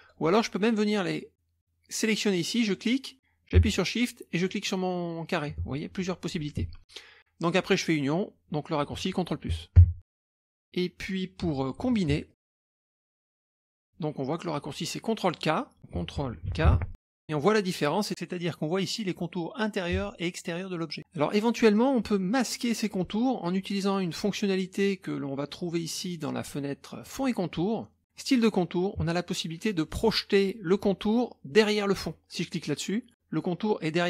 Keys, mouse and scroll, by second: 0.0 click, 2.7 click, 4.3 shift+click, 9.8 ctrl+KP_Add, 10.3 scroll up 2, 10.4 middle click, 10.4 scroll down 2, 10.5 scroll up 2, 10.5 scroll down 2, 10.6-11.0 scroll up 2, 11.4 click, 11.9 shift+click, 12.3 click, 12.6 scroll up 2, 12.8 click, 13.3 click, 13.5 space, 14.8-15.2 scroll down 1, 15.2-15.6 scroll up 1, 16.5 ctrl+k, 17.8 scroll up 1, 17.9 scroll down 1, 18.0-18.5 scroll up 1, 18.5 scroll down 1, 18.5-19.7 scroll up 1, 20.3-20.8 ctrl+scroll down 2, 20.8 middle click, 20.8 scroll up 1, 27.0 click, 28.2 click, 32.5 click.